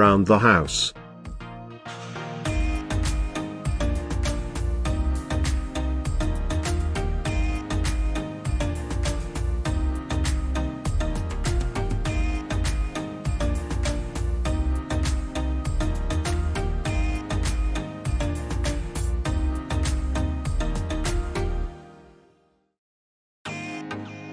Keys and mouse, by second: 0.7-1.3 shift+middle drag, 2.4 g, 2.8 shift+z, 4.3 click, 4.9 s, 5.5 click, 5.8-6.2 shift+middle drag, 7.0 g, 7.4 shift+z, 8.7 click, 9.0-11.0 middle drag, 11.3 g, 11.7 shift+z, 12.6 click, 13.2-15.0 middle drag, 15.4-15.8 middle drag, 16.5 shift+middle click, 17.9 shift+d, 18.2 shift+z, 21.4 click, 21.9-22.4 middle drag, 22.6 shift+middle drag, 23.8 g, 24.2 shift+z.